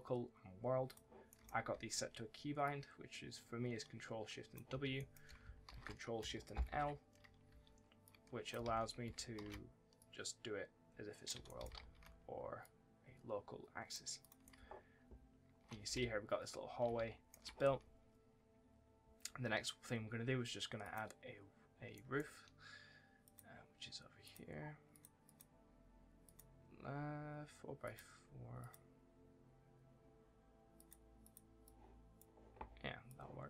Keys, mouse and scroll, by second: 0.7 click, 1.1 right click, 1.6 2, 2.5 click, 4.6 1, 4.8 right click, 5.5 ctrl+shift+w, 6.9 ctrl+shift+l, 7.3 2, 7.9 click, 8.5 ctrl+z, 9.2 ctrl+shift+w, 9.8 click, 11.0-11.9 typing, 11.3 right click, 12.5 click, 14.3 right click, 15.7 s, 16.8 w, 17.5 s, 18.0-18.9 scroll up 1, 20.7 click, 21.3-21.6 scroll down 1, 21.8 right click, 22.0 w, 23.1 click, 24.4-24.8 scroll down 1, 24.8 click, 25.8 scroll up 1, 26.1 click, 28.8-29.5 scroll up 1, 29.5 scroll down 1, 30.6 click.